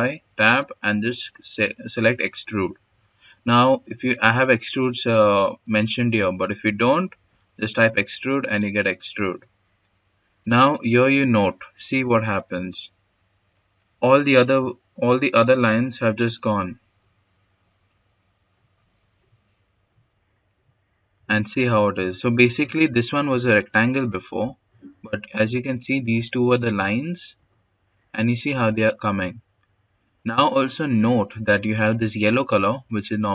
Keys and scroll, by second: 6.0 e, 6.4 x.